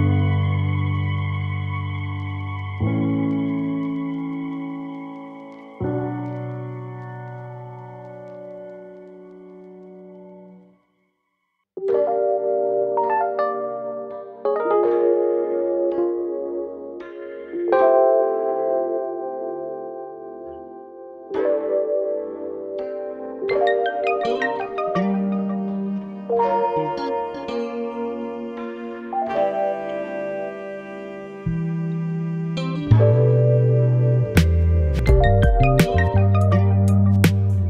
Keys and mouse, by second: 0.9 shift+click, 1.1 click, 2.0 Tab, 2.8 click, 3.2 shift+click, 3.5 ctrl+click, 3.8 ctrl+z, 4.2 middle click, 4.8 shift+middle click, 5.3 middle click, 6.1 middle click, 6.6 middle click, 6.7 middle click, 6.9 middle click, 7.1 middle click, 7.3 middle click, 7.6 shift+middle click, 8.8 middle click, 9.5 click, 9.7 click, 9.9 Tab, 9.9 click, 10.0 middle click, 10.3 click, 10.6 middle click, 10.9 middle click, 11.2 middle drag, 11.4 middle click, 11.8 Tab, 11.8 middle click, 12.6 middle click, 12.9 middle click, 13.1 middle click, 13.3 middle click, 13.4 click, 13.8 middle click, 14.1 right click, 14.4 middle click, 14.9 right click, 15.5 right click, 15.8 right click, 16.0 middle click, 17.1 middle click, 17.4 middle click, 17.7 middle click, 18.3 middle click, 18.5 ctrl+middle click, 18.7 middle click, 19.1 middle drag, 20.0 middle drag, 21.2 middle click, 21.5 middle click, 21.6 click, 22.4 click, 22.8 shift+middle click, 23.3 click, 23.9 click, 24.4 Tab, 25.0 click, 25.7 click, 26.2 click, 26.6 shift+middle click, 26.9 shift+middle click, 27.1 middle click, 27.5 shift+middle click, 27.8 Tab, 28.0 middle click, 28.4 shift+middle click, 28.7 Tab, 28.9 click, 29.6 shift+click, 30.0 click, 30.7 middle click, 31.0 click, 32.7 middle click, 33.0 shift+click, 34.0 click, 35.4 click, 36.7 click, 37.1 click.